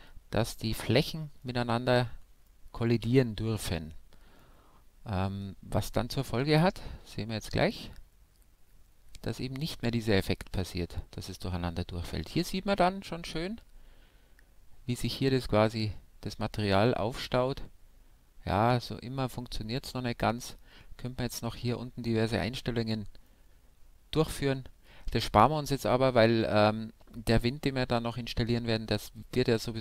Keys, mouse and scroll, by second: 6.4 alt+a, 7.4 middle click, 18.8-20.6 middle drag, 20.8-21.4 scroll up 1, 21.4-23.1 middle drag, 23.6 middle click, 24.9 middle click, 25.3 scroll down 1, 25.5-27.3 middle drag.